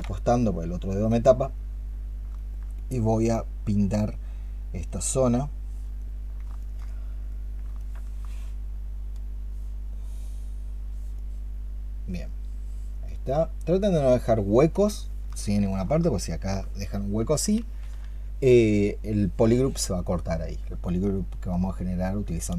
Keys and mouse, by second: 2.2 alt+click, 6.5 alt+click, 8.1 alt+click, 14.8 alt+click, 15.9 alt+click, 17.9 ctrl+z.